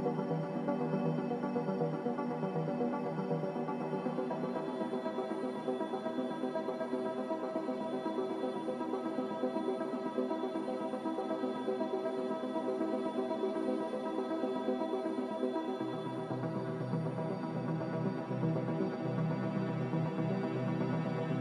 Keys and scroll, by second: 3.8-4.9 typing, 4.0 Return, 7.2 n, 9.7 z, 13.9 n, 19.1 z.